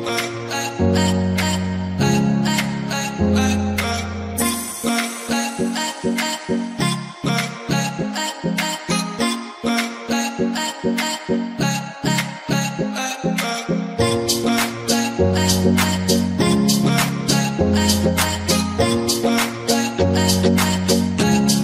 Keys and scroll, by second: 0.9 Delete, 2.1-3.3 typing, 13.4-14.3 typing.